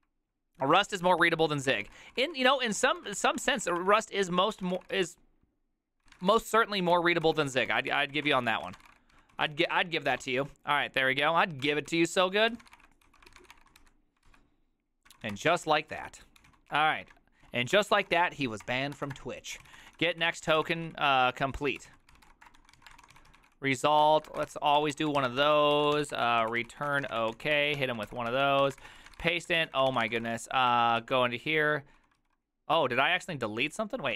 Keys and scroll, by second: 1.3 alt+{, 1.5-11.0 typing, 3.1 Return, 3.2 ctrl+d, 4.4 ctrl+d, 7.0 ctrl+t, 7.3 ctrl+n, 11.7 ctrl+n, 12.0 ctrl+n, 12.3 ctrl+s, 12.5-13.9 typing, 13.4 ctrl+c, 13.6 Return, 14.4 ctrl+c, 15.0-30.6 typing, 30.8 ctrl+^, 31.1 ctrl+c, 32.1-33.5 typing, 32.3 ctrl+u.